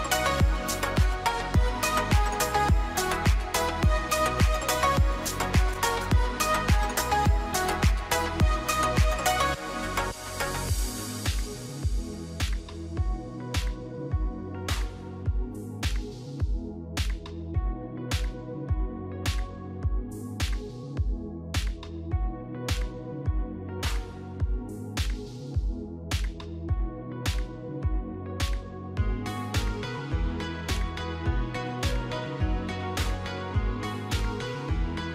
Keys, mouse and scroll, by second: 0.9-1.4 scroll down 2, 1.4 click, 2.5 click, 3.9 click, 4.4 middle click, 5.5 click, 5.7 middle click, 6.5 middle click, 6.5 scroll down 4, 6.7 middle click, 7.8 s, 9.8 middle click.